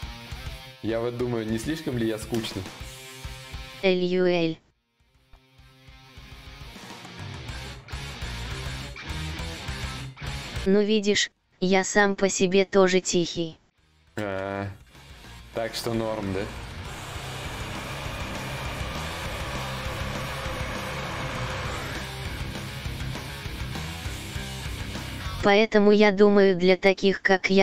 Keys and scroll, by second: 22.4 ctrl+z, 22.4 y.